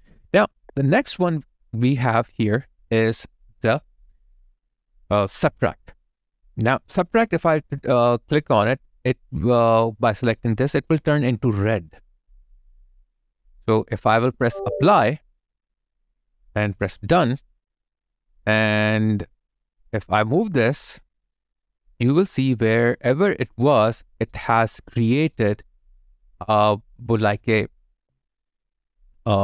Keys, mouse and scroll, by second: 2.2 right click, 22.2 alt+click, 22.9 alt+right click, 24.0 alt+right click, 24.7 alt+middle click, 25.3 alt+right click, 28.0 alt+click.